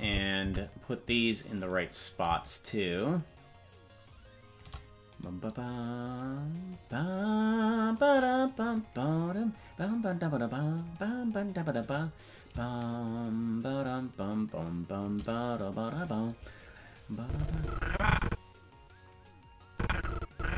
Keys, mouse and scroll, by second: 0.0 Left, 0.4 Right, 1.6 right click, 2.9-4.6 shift+drag, 5.2-6.5 right drag, 6.7-8.0 drag, 8.7 right click, 9.6-10.9 drag, 11.9 right click, 13.8-15.1 shift+drag, 16.0 right click, 17.2-20.5 drag.